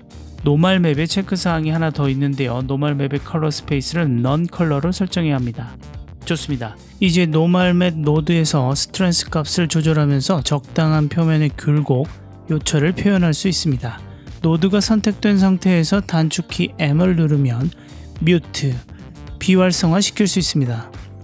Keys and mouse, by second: 2.6-4.1 drag, 4.4 click, 5.4-7.0 drag, 7.3 click, 8.2-10.3 drag, 11.0 m, 11.5-12.5 drag, 13.3-14.3 ctrl+middle drag, 14.7 click, 15.6-18.3 typing.